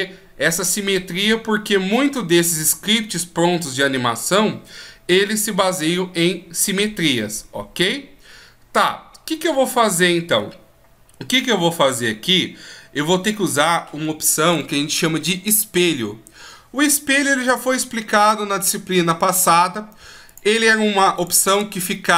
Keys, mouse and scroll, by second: 20.3 click.